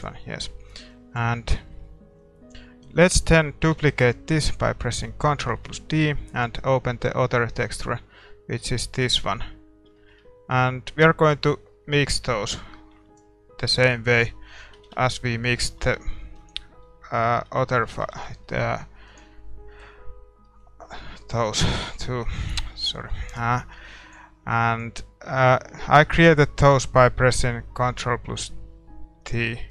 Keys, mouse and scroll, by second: 0.0-6.4 drag, 9.2-15.8 drag, 14.5-16.0 middle drag, 15.0 shift+z, 16.4-22.7 drag, 22.7 ctrl+t, 23.3-29.7 middle drag, 23.9-29.7 drag.